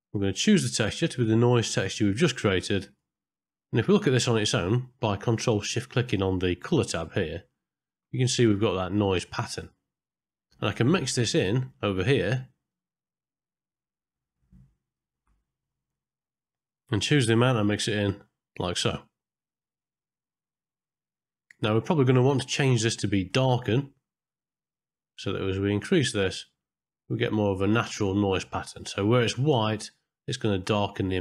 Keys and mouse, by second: 0.7-1.7 drag, 2.7 click, 3.2 middle click, 4.5 middle click, 7.0 ctrl+shift+click, 10.4 middle click, 11.7-12.7 drag, 13.9 middle click, 15.9 middle click, 17.1 click, 19.0-21.5 drag, 21.9-23.6 drag, 25.4-28.1 drag.